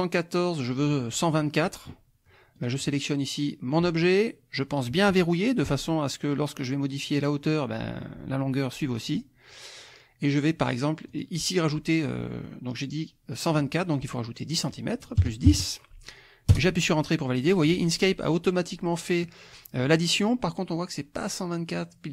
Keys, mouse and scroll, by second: 2.6 click, 5.2 click, 11.1 click, 14.5 click, 15.2 KP_Add, 15.5 KP_1, 15.5 KP_0, 16.5 Return.